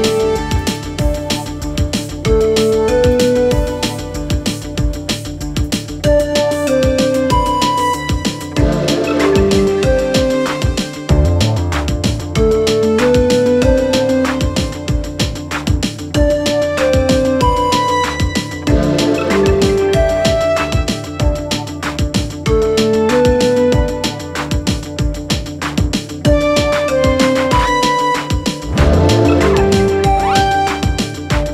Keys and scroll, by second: 0.7 c, 0.8 e, 1.3 Escape, 3.1 e, 3.5 Escape, 4.8 ctrl+Page_Down, 6.1 ctrl+Page_Down, 8.4 F4, 9.1 Escape, 11.3 F2, 14.8 space, 19.4 space.